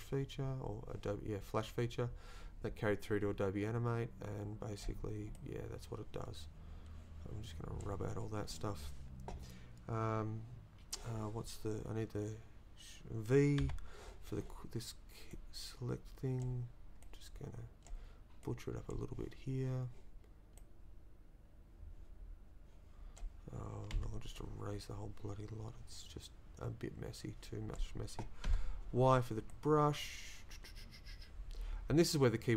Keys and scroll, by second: 13.6 v, 23.9 e, 28.5 y.